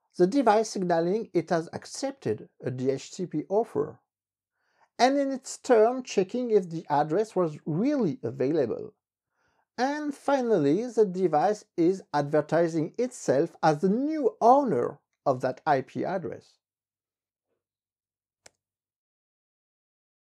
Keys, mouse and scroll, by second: 18.4 ctrl+c.